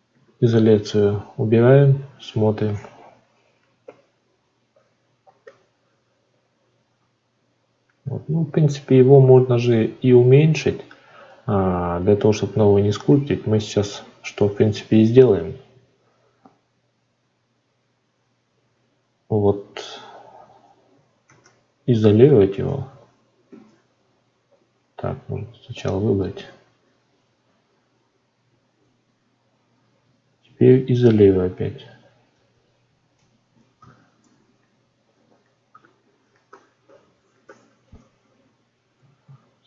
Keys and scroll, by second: 39.2 ctrl+s.